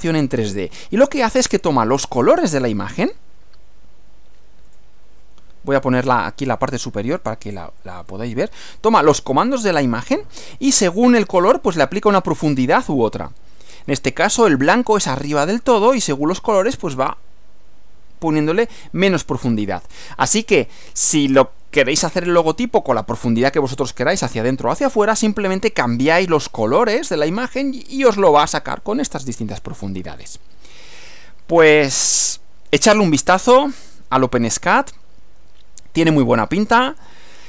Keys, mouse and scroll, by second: 4.7 click, 6.1 right click, 7.1 click, 8.1-8.9 drag, 10.3 click, 11.8-14.1 drag, 20.4-23.6 drag, 31.7-34.7 drag, 36.1 click.